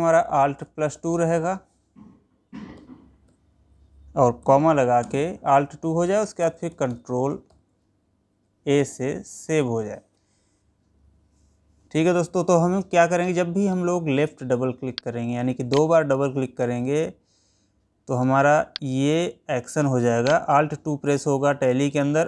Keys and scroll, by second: 5.5 space.